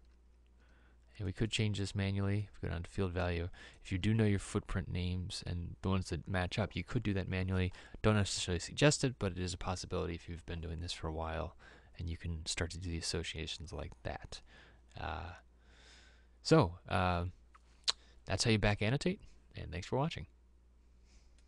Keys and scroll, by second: 0.3 e.